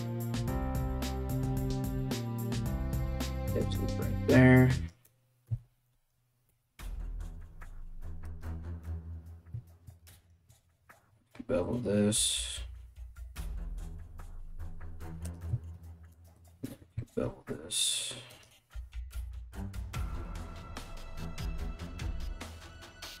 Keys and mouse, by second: 0.5 KP_7, 0.9 alt+right click, 1.1 s, 2.0 KP_1, 2.5 ctrl+r, 2.9 right click, 4.3 shift+right click, 5.1 KP_1, 6.1 g, 9.8 alt+right click, 10.5 ctrl+b, 15.7 alt+right click, 16.4 ctrl+b, 18.6 3, 18.9 right click, 18.9 shift+middle click, 19.2 ctrl+shift+right click, 19.2 ctrl+middle click, 19.4-23.2 alt+middle drag, 19.7 alt+s, 20.0 right click, 20.3 right click, 20.6 ctrl+right click, 20.9 alt+s, 22.0 2, 22.1 shift+right click, 22.3 g, 22.6 shift+right click, 22.8 g.